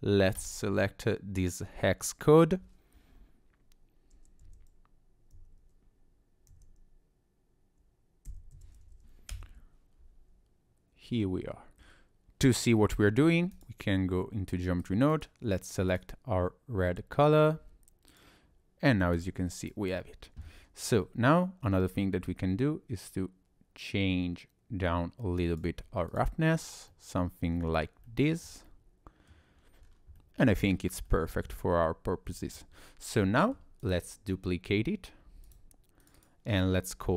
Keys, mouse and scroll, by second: 8.5 3, 18.3 click, 19.2 click, 19.6 click, 20.0-21.1 scroll up 1, 22.3 click, 26.1 click, 26.5-26.9 scroll down 2, 26.9 middle click, 27.7-28.0 scroll down 2, 28.1 shift+middle click, 28.6 middle click, 29.6-30.0 scroll down 3, 30.2 middle click, 30.7 scroll up 1, 31.1 shift+middle click, 31.7-32.1 scroll down 2, 32.4 shift+middle click, 32.8 scroll up 2, 33.3 shift+middle click, 33.8 click, 35.5 click, 36.0 click, 36.2 click.